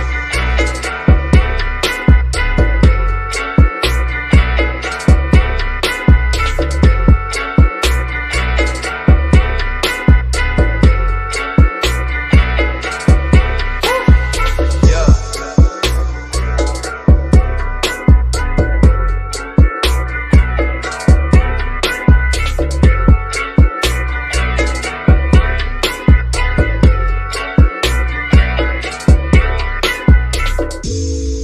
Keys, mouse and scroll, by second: 0.3 click, 4.6 click, 7.6-8.1 scroll up 1, 8.4 click, 9.7 shift+middle click, 10.5 shift+scroll down 1, 10.9 shift+middle click, 11.8 scroll down 1, 12.8 click, 14.7-16.2 scroll down 1, 17.2 shift+click, 17.7 scroll up 1, 20.2 click, 24.4-26.0 shift+middle drag, 26.0-26.6 scroll up 1, 28.6-29.4 scroll down 1, 29.4 click, 31.1 scroll up 1.